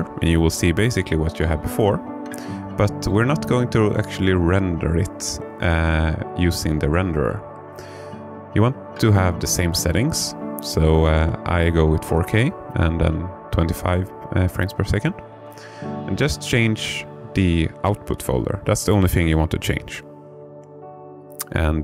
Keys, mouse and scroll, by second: 1.4 click, 4.5 click, 15.7 click.